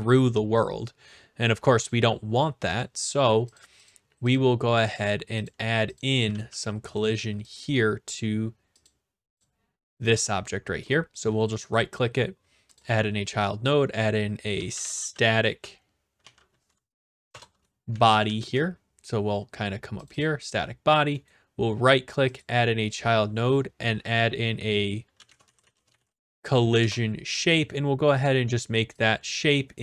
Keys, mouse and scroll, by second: 1.9 click, 2.8 click, 3.6 click, 4.9 click, 5.5 click, 6.0 click, 6.0-7.0 typing, 7.0 middle click, 7.5 click, 8.0 right click, 8.2 middle click, 8.3 scroll down 3, 8.9 click, 9.4 click, 10.1 a, 11.1-12.7 right drag, 12.8-13.8 drag, 14.3-16.2 typing, 17.3 BackSpace, 17.9 Down, 18.1 Down, 18.2 Down, 19.5 scroll up 3, 20.1 click, 20.2 click, 21.3 right click, 22.2 right click, 22.4-23.4 drag, 24.9-26.4 typing, 26.8 Return, 28.2 click, 29.0 click.